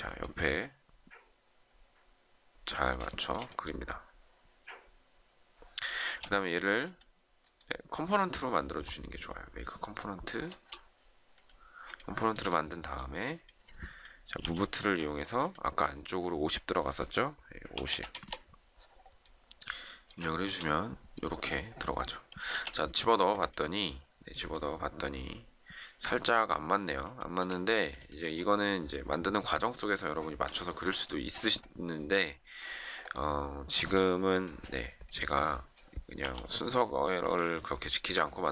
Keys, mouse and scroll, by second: 3.0 shift+middle click, 6.0 space, 11.9 shift+middle click, 14.3 m, 17.3-18.2 typing, 20.2 shift+middle click, 22.4 space, 27.1 shift+middle click, 30.5 shift+middle click, 36.1 p.